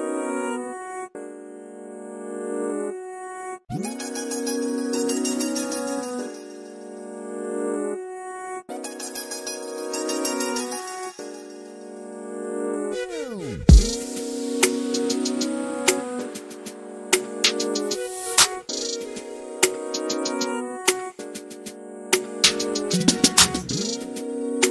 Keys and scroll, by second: 1.0 typing, 22.0 n, 22.9 m.